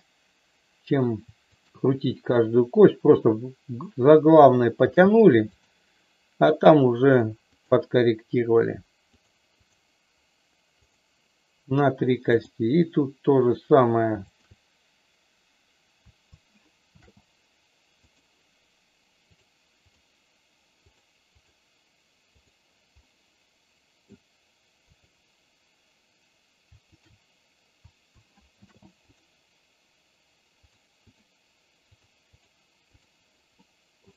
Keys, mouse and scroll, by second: 1.5-2.9 shift+drag, 4.7 ctrl+shift+c, 6.9 click, 9.0 click, 10.9 click, 14.4-15.7 shift+drag, 16.8 ctrl+shift+c, 19.9 click, 20.8 click, 21.3 click, 23.0-24.0 middle drag, 24.9-26.2 drag, 28.5 ctrl+shift+c, 30.5 click, 32.8 click, 33.5 middle click.